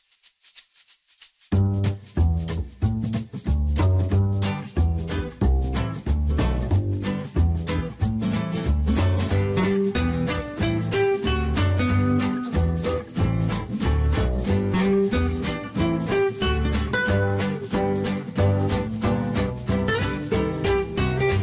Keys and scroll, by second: 11.1 6, 11.5 Return.